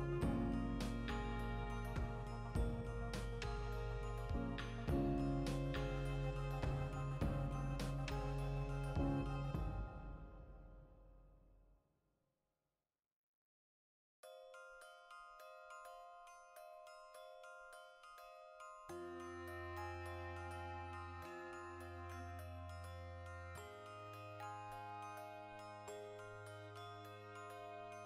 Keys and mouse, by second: 0.6 click, 0.8 e, 2.1 click, 2.3-4.1 shift+middle drag, 3.1 ctrl+r, 4.1 click, 4.3 ctrl+r, 5.1 click, 5.2 ctrl+r, 6.0 click, 6.1 ctrl+r, 6.7 click, 6.8 ctrl+r, 7.6 click, 7.7 ctrl+r, 8.4 click, 8.5 ctrl+r, 9.2 click, 9.5 ctrl+r, 10.1 click, 10.2 ctrl+middle click, 10.5 ctrl+r, 11.0 click, 11.2 ctrl+middle click, 11.4 ctrl+r, 11.6 click, 12.0 ctrl+z, 12.5 ctrl+r, 13.4 click, 13.5 ctrl+r, 14.3 click, 14.4 ctrl+r, 14.9 click, 15.0-16.3 ctrl+middle drag, 16.3 alt+right click, 16.4-19.3 shift+middle drag, 18.7 e, 19.3 click, 19.5 e, 20.7 click, 21.7 f, 24.0 click, 24.0 e, 24.5 click, 24.6 e, 25.3 click, 25.8 e, 26.4 click, 26.6 s, 27.1 click, 27.7 i.